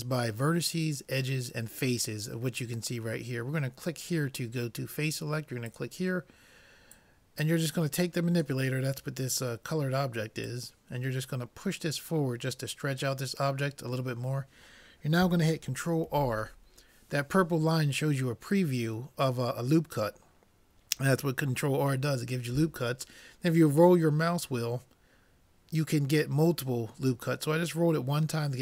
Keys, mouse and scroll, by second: 4.1-8.6 drag, 10.4-12.4 drag, 16.1 ctrl+r.